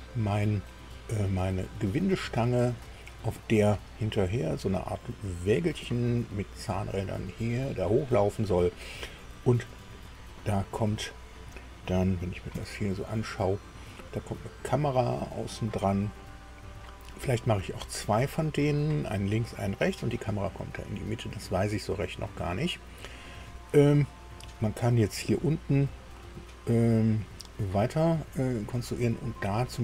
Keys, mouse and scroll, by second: 1.5 scroll down 2, 2.0 middle click, 2.9 shift+middle click, 3.8 click, 4.5 click, 12.5 KP_2, 17.4-18.8 drag, 23.1-23.8 scroll up 1, 24.1-25.4 drag.